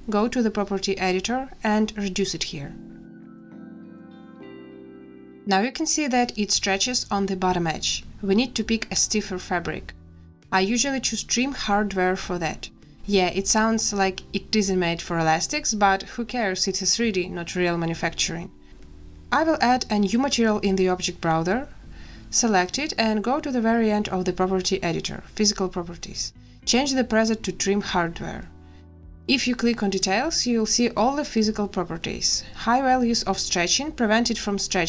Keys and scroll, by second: 1.8 5, 2.0 Return, 3.2 space.